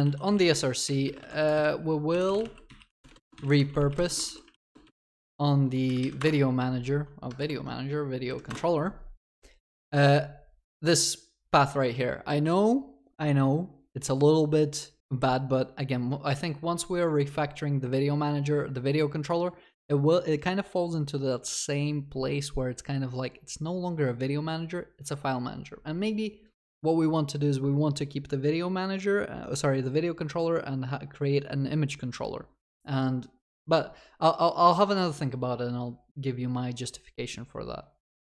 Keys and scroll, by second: 0.0 Return, 4.3 ctrl+s, 4.5 ctrl+shift+n, 6.2 ctrl+shift+n, 8.5 ctrl+shift+n.